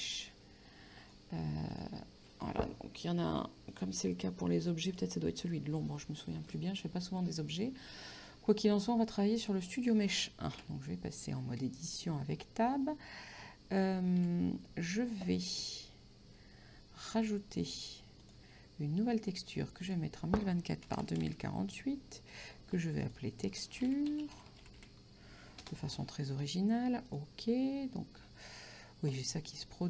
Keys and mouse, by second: 1.1 click, 3.8 click, 5.0 click, 6.5 click, 8.2 click, 10.6 Tab, 13.8 a, 18.3 click, 19.9 click, 21.0 KP_2, 21.1 KP_0, 22.2 KP_8, 22.4 click, 23.6-25.3 typing, 25.7 Return, 27.1 click.